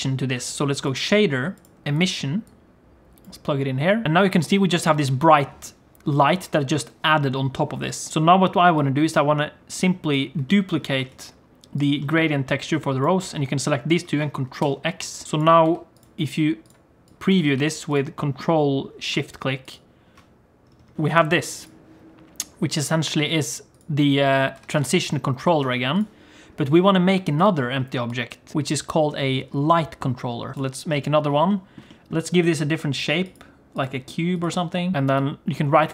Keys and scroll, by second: 11.1 shift+d, 14.6 ctrl+x, 15.6 g, 17.4 g, 20.9 alt+shift+z, 20.9 g, 24.6 g, 28.5 shift+a.